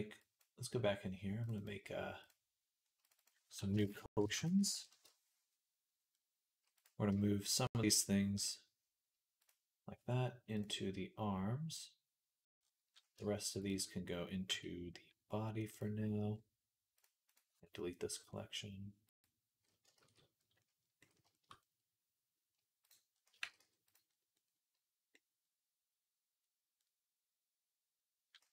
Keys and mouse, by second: 0.0-1.3 drag, 1.4-6.7 drag, 6.7 right click, 6.9 shift+click, 7.6-13.4 right drag, 8.2 m, 13.4 shift+click, 13.6-27.4 right drag, 14.3 m, 19.9 ctrl+s, 23.2 g, 27.4-28.5 middle drag.